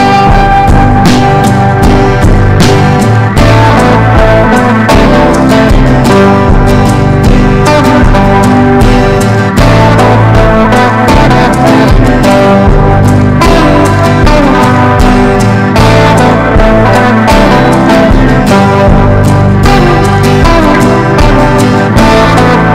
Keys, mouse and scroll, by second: 8.2 ctrl+g, 9.0 typing, 10.0 click, 11.1 Down, 11.4 typing, 11.4 Down, 13.6-16.6 drag, 18.0 ctrl+g, 20.0 click, 22.4 Down.